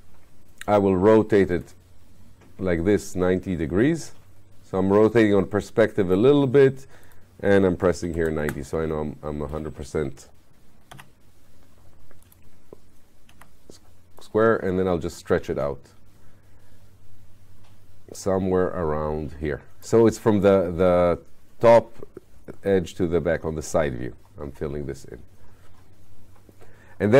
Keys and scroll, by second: 7.8-8.7 typing, 10.9 r, 13.3 r.